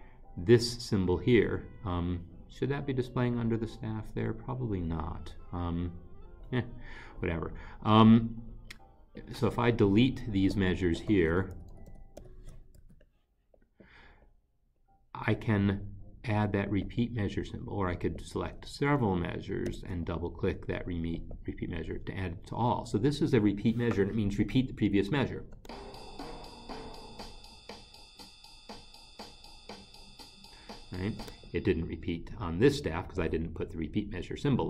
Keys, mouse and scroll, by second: 9.1 click, 11.4 ctrl+shift+Right, 11.6 ctrl+shift+Right, 11.7 ctrl+shift+Right, 11.9 ctrl+shift+Right, 12.2 ctrl+shift+Right, 12.8 Delete, 17.0 double click, 18.8 ctrl+shift+Right, 19.1 ctrl+shift+Right, 19.7 ctrl+shift+Right, 21.1 click, 21.4 double click, 25.0 click, 26.4 space.